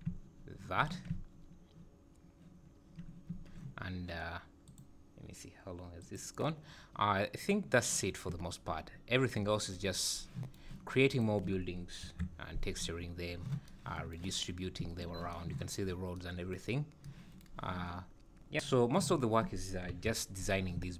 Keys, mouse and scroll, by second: 1.1 `.